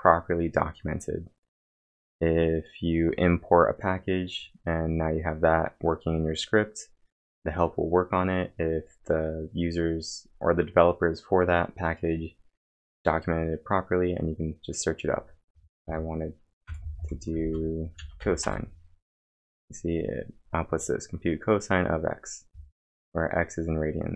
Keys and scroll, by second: 15.3-17.9 typing, 18.4 Return.